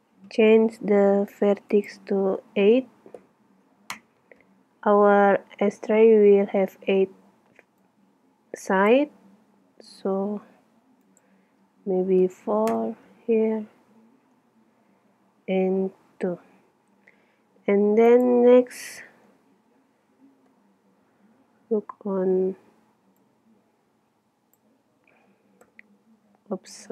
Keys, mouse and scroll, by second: 1.8 click, 7.9-9.1 drag, 9.7 click, 11.1 click, 20.5 KP_7, 21.4-23.3 middle drag, 23.3-25.1 drag, 25.7 KP_0.